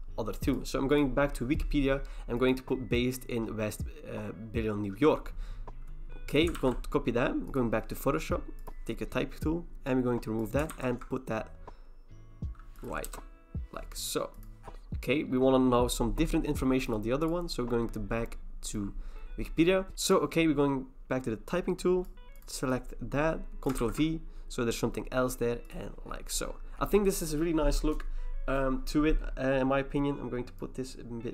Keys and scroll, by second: 6.6 ctrl+c, 10.7 ctrl+v, 13.1 Return, 19.9 ctrl+c, 23.8 ctrl+v.